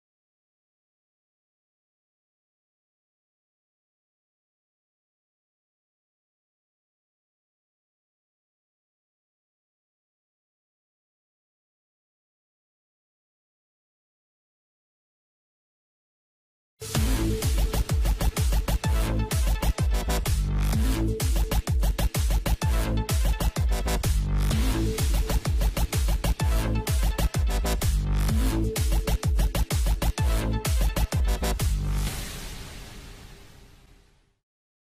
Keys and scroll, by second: 16.6 F5.